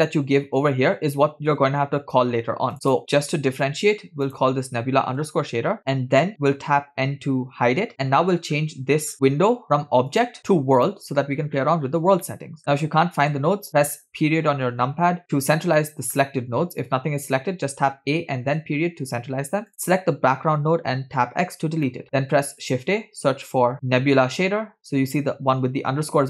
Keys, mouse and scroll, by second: 2.7-5.8 drag, 7.0 n, 8.2-8.5 scroll down 2, 8.6-10.1 scroll up 6, 10.2-11.1 drag, 11.5-12.2 scroll down 4, 12.3-13.4 middle drag, 14.1 KP_Decimal, 15.8 middle click, 17.8 a, 18.5 KP_Decimal, 19.7 click, 21.5 x, 22.0 middle click, 22.3 shift+a.